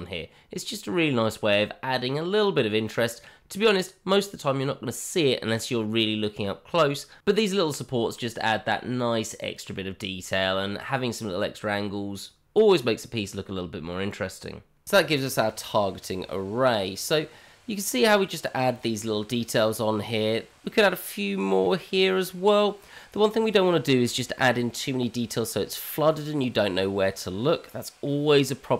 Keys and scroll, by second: 1.2 Tab, 1.8 Tab, 3.2 q, 3.9 q, 6.2 Tab, 7.7 g, 8.6 shift+z, 9.2 shift+z, 9.5 g, 11.0 shift+z, 11.0 Tab, 11.9 alt+x.